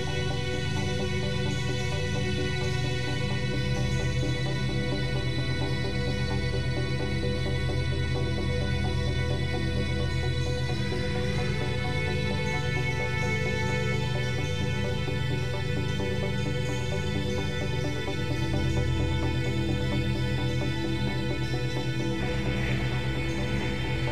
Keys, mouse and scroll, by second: 9.0 ctrl+v, 10.4 ctrl+v, 11.6 ctrl+b, 20.3 click, 20.8 Tab, 21.2-21.7 scroll down 4, 21.7-22.9 middle drag, 22.9-23.5 scroll down 3, 23.5-24.1 scroll up 1.